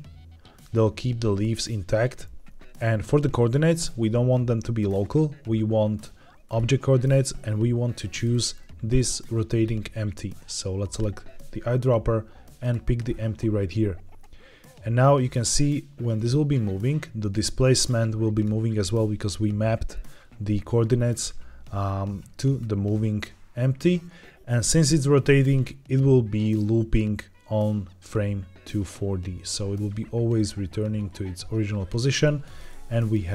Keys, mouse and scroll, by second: 4.7-6.5 drag, 7.9 middle drag, 8.2-9.4 scroll down 4, 9.4 middle drag, 10.8 click, 14.1-18.4 drag, 20.9-22.5 scroll up 4, 22.5-32.1 drag, 32.1-32.5 middle drag, 32.5-32.9 scroll down 2, 32.9-33.3 middle drag.